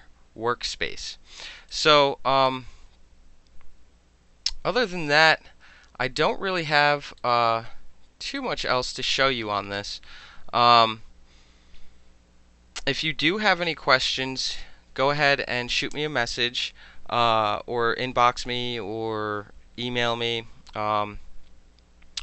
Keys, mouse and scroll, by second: 1.7-2.4 alt+drag, 7.1-8.3 alt+middle drag, 8.3-8.9 alt+right drag, 8.9 alt+middle click.